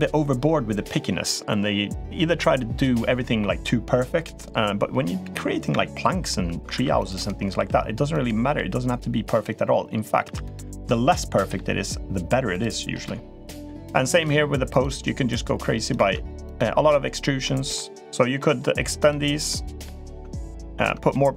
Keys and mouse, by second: 6.5 ctrl+r, 7.3 s, 8.3 s, 10.1 3, 10.2 click, 10.9 middle click, 12.3 click, 13.3 click, 13.9 click, 14.5 click, 15.1 e, 15.8 ctrl+z, 16.3 click, 17.2 middle click, 18.0 middle click, 18.8 click, 19.3 middle click, 20.5 ctrl+right click, 20.9 middle click.